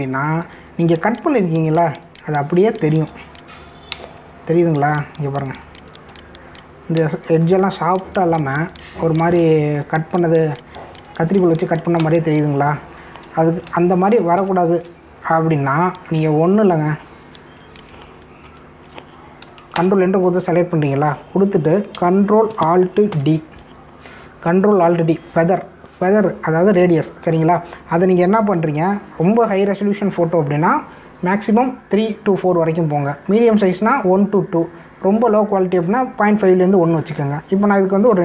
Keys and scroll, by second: 1.0 space, 14.6 ctrl+alt+z, 19.4 ctrl+alt+z, 20.7 ctrl+Return, 24.0 ctrl+alt+d.